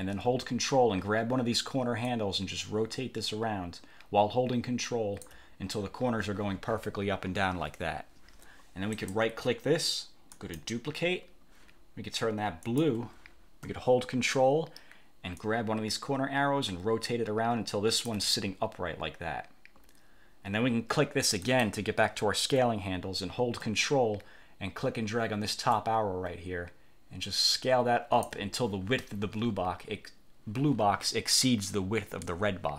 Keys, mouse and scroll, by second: 2.2-5.6 ctrl+drag, 9.0 click, 10.4 click, 12.8 click, 15.5-18.4 ctrl+drag, 21.6 click, 25.9-28.6 ctrl+drag.